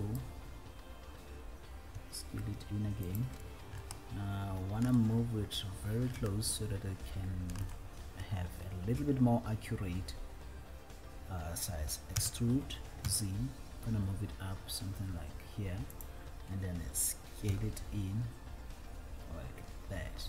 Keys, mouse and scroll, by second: 0.5 click, 0.5 s, 2.1 s, 3.5 click, 4.0-5.4 shift+middle drag, 5.7-6.4 scroll up 3, 6.5-8.0 shift+middle drag, 8.0 shift+scroll up 1, 12.4 e, 13.4 z, 16.3 click.